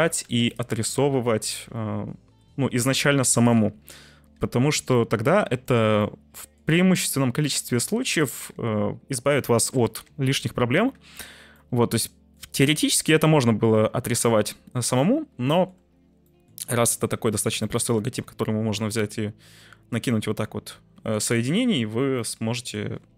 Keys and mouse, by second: 0.2 1, 0.4 middle click, 4.5 j, 5.0 middle click, 5.4 Tab, 6.1-6.5 middle drag, 6.7 Tab, 10.3 j, 10.9 Tab, 11.6-12.3 middle drag, 13.9 t, 14.3 middle click, 15.4 shift+middle drag, 16.2 middle drag, 17.7 middle click, 18.0 Tab, 20.9 Tab, 21.2-21.5 middle drag, 22.3-22.7 middle drag.